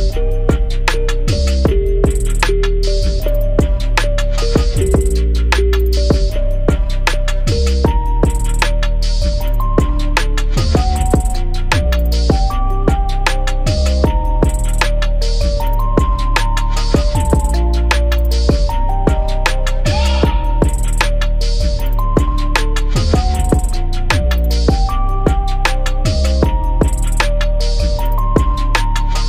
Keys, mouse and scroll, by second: 0.0 click, 0.2-0.7 scroll up 4, 0.7 click, 1.0 click, 1.4 scroll down 4, 2.3 click, 3.2 click, 3.6 click, 4.0 shift+drag, 4.2 shift+click, 5.2 g, 6.8-7.3 scroll down 7, 7.3 scroll up 1, 7.5 click, 8.3 alt+h, 8.5 scroll up 4, 8.7-9.3 scroll down 8, 9.3 click, 10.1 click, 10.6-11.3 scroll up 1, 11.3 shift+d, 12.5 s, 13.4-13.8 scroll up 8, 13.8-14.2 scroll down 2, 14.2-15.3 drag, 16.3 click, 16.9 s, 18.3-18.9 drag, 19.1 click, 19.3 click, 20.1 click, 20.8 click, 21.2 s, 22.8 click, 23.0-23.4 scroll up 2, 23.4 click, 24.0 click, 24.5 g, 26.2 g, 27.3 s, 28.7 click.